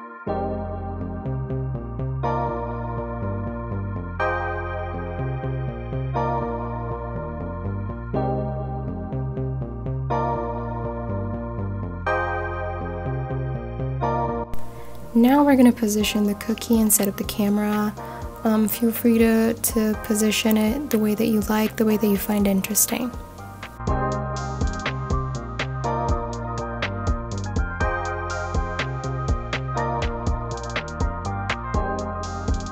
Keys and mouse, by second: 0.1 middle click, 1.4 shift+click, 2.2 shift+click, 3.4 ctrl+shift+b, 5.9 click, 7.6-8.4 right drag, 8.7 click, 9.1-10.7 middle drag, 11.2-12.1 middle drag, 12.6-13.0 drag, 14.5 r, 14.8 x, 15.0 KP_9, 15.2 KP_0, 15.6 KP_Enter, 16.5 g, 16.6 z, 17.2 click, 18.4 click, 19.3-20.7 middle drag, 21.4 click, 22.3-23.0 middle drag, 24.0 click, 24.8 shift+s, 25.8 shift+a, 28.7-29.8 drag, 31.2 ctrl+alt+KP_0.